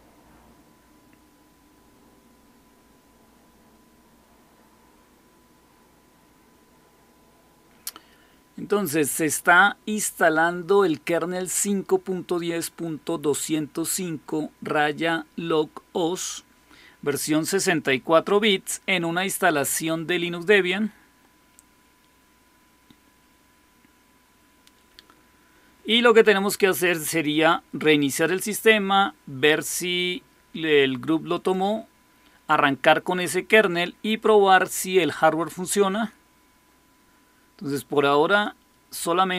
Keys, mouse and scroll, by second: 31.2 click, 38.2 click.